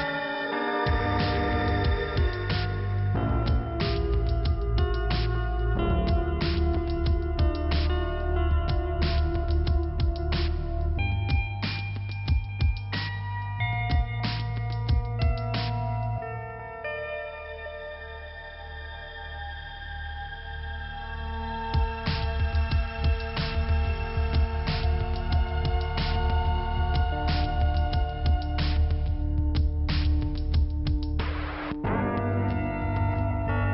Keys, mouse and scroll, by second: 0.4 scroll down 1, 3.1-4.3 scroll down 2, 4.6 middle click, 5.1 scroll up 1, 6.6 click, 7.9 click, 10.2 click, 12.1 f, 12.8-13.9 scroll up 1, 13.9 click, 15.5 click, 16.5 click, 17.2 click, 20.1 click, 20.2 click, 21.0 middle click, 21.9 click, 22.6 scroll up 1, 23.0 click, 23.9 click, 26.2 click, 26.8 middle click, 28.8 scroll down 2, 29.9 middle click, 30.7 click, 32.1 click, 33.3 click.